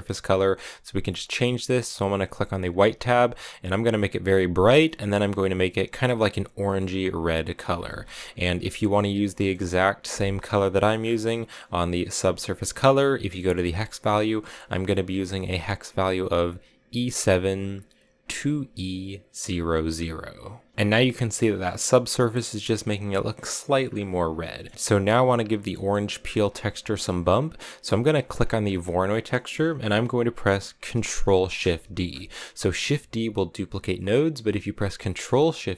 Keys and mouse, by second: 0.3 middle click, 2.5 click, 9.2 middle click, 12.0 click, 24.3 shift+middle click, 25.7 middle click, 26.4 click, 28.1 click, 28.9 click, 29.3 middle click, 31.6 ctrl+shift+d.